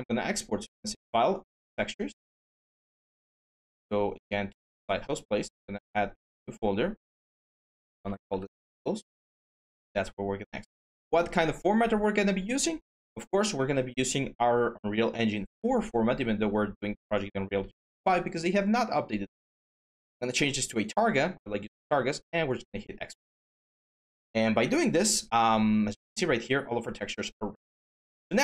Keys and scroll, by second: 7.1 Caps_Lock, 7.2-8.7 typing, 28.0 alt+Tab.